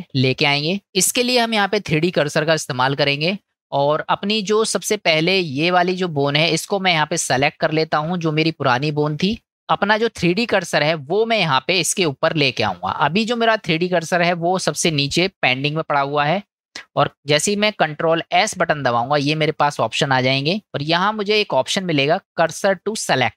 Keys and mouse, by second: 18.5 shift+s.